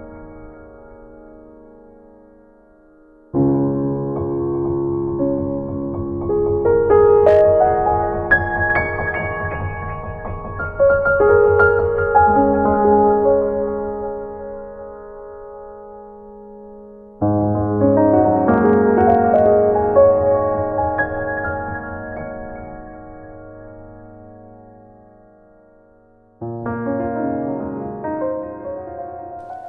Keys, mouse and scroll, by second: 0.0 z, 0.3 middle click, 3.1 click, 3.7 right click, 4.4 ctrl+s, 5.6 right click, 6.7 right click, 8.0 click, 8.8 click, 11.5 click, 13.2 ctrl+Up, 13.2 ctrl+Down, 13.2 click, 14.3 click.